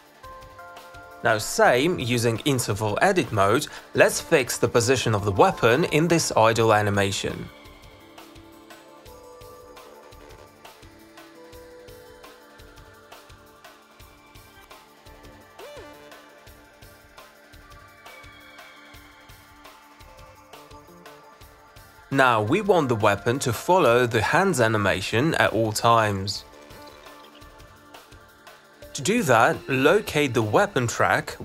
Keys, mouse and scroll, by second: 0.1 click, 3.2 click, 4.2-5.7 alt+drag, 4.7 e, 7.5-8.5 drag, 8.9 alt+middle click, 9.0 t, 9.3 alt+click, 9.7 click, 10.0 click, 10.2 click, 10.2 w, 10.8 alt+click, 11.1 click, 11.4 click, 11.8 alt+scroll, 12.2 alt+click, 12.5 click, 12.7 e, 12.9 click, 12.9 w, 13.3 click, 13.9 alt+click, 15.2 click, 15.4 e, 15.7 click, 16.0 q, 16.1 click, 16.1 click, 16.6 click, 16.7 w, 17.0 click, 17.6 alt+click, 22.4 click, 23.2 click, 29.1 click, 29.7 alt+click, 31.0 click.